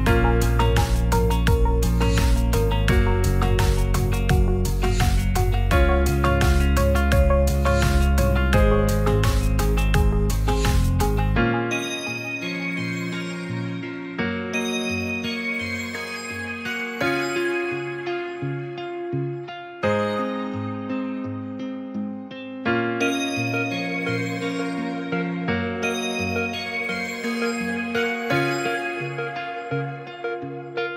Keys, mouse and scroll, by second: 0.6 Tab, 1.2 click, 1.3 Tab, 1.7 c, 2.4 s, 2.8 z, 3.8 click, 4.1 Tab, 4.4 middle drag, 6.1 shift+middle click, 6.6 shift+middle click, 7.5-7.9 middle drag, 8.1 click, 10.7 Tab, 11.9 g, 12.0 z, 14.8 Tab, 15.5 middle drag, 20.8 ctrl+a, 21.6 middle click, 22.2 Tab, 23.0 alt+middle click, 24.0 alt+z, 24.4 click, 24.9 shift+middle click, 25.4 click.